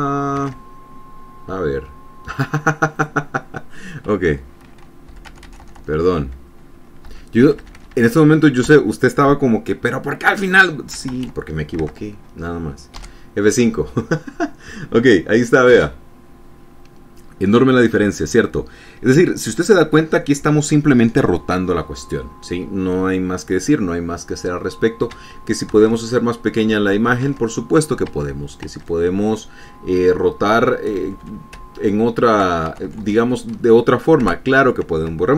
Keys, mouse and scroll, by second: 1.0 alt+Tab, 3.5 click, 5.7 Up, 5.8 Right, 7.6 Delete, 8.0 BackSpace, 11.7 ctrl+s, 12.4 alt+Tab, 13.5 F5, 25.8 alt+Tab, 27.9 alt+Tab, 28.7 alt+Tab, 31.5 Up, 32.1 Right, 34.8 BackSpace.